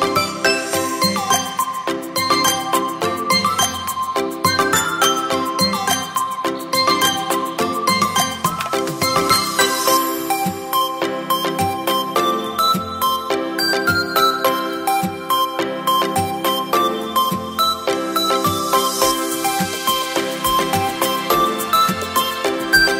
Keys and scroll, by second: 0.6 ctrl+t, 9.1 Return, 16.3 Return, 21.0 b, 22.7 x.